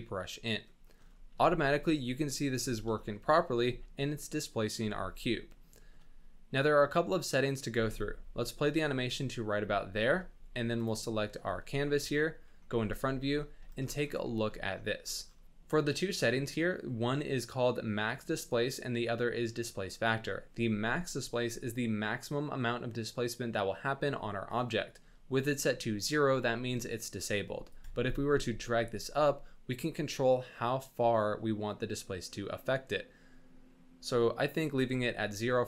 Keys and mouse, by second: 0.2 middle drag, 0.8 shift+middle drag, 1.3 space, 2.5 space, 2.9 shift+middle click, 3.2 drag, 3.6 space, 4.7 space, 5.1-5.5 drag, 5.8 shift+middle click, 7.1 click, 7.7 space, 9.5 space, 11.3 shift+click, 11.9 KP_1, 12.7 z, 13.1 shift+drag, 13.7 shift+drag, 14.3 shift+click, 27.8-34.6 shift+drag.